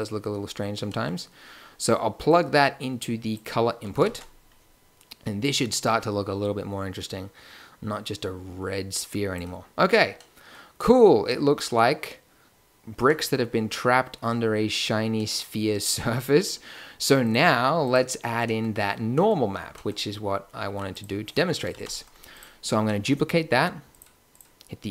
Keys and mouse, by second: 1.7-2.3 middle drag, 2.3-5.2 drag, 5.2 shift+z, 8.9-10.9 drag, 11.5 click, 13.9-17.3 drag, 17.3 g, 21.7 g, 21.7 shift+d, 22.9-23.8 drag, 24.0 click.